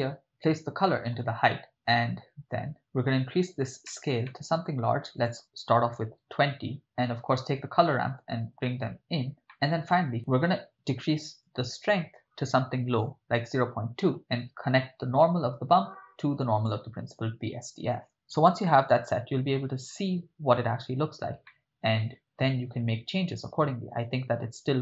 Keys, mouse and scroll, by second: 0.2-1.1 drag, 1.7 middle click, 3.9 middle click, 4.3 ctrl+middle click, 5.2-6.4 drag, 6.8 middle click, 7.4-8.2 drag, 8.8-9.3 drag, 9.5-9.9 middle drag, 11.4-13.5 drag, 14.4 click, 15.2-17.1 drag, 21.5-22.8 middle drag.